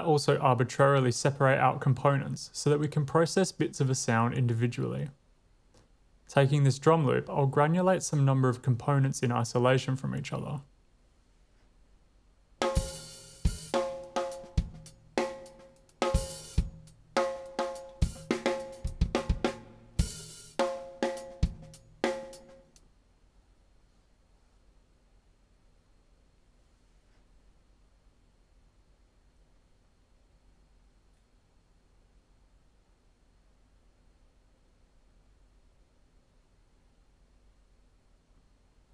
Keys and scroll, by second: 11.6 w, 12.6 space, 22.9 space, 23.5 w, 24.4 shift+super+r, 25.6 Return, 26.4 Tab, 28.2-32.2 typing, 34.3 typing.